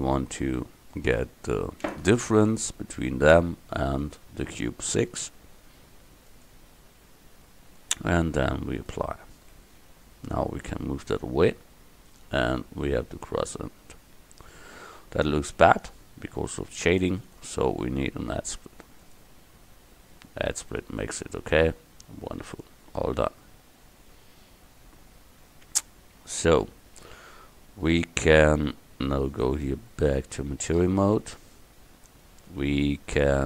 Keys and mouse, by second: 1.0-10.4 drag, 10.4 right click, 12.2 click, 12.9 middle click, 14.5-16.5 drag, 16.5 middle click, 17.3-19.2 drag, 20.2 middle click, 22.9 middle click, 23.0 KP_1, 28.3-29.4 middle drag, 29.4-31.5 drag.